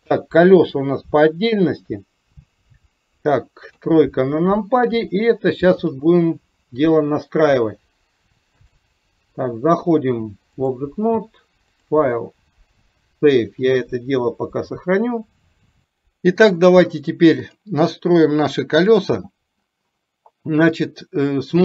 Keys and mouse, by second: 0.2 KP_1, 3.8 KP_3, 8.7 click, 10.1 click, 11.8-13.6 drag, 17.4 click.